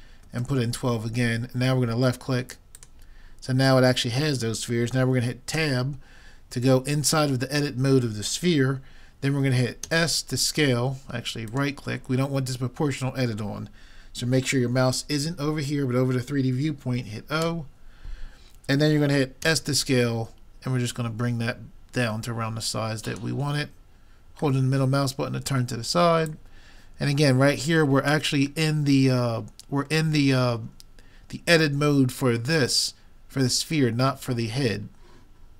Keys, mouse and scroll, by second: 5.6 Tab, 9.9 s, 17.5 o, 19.5 s, 24.6-26.4 middle drag, 26.3-28.0 drag, 28.7-30.6 middle drag.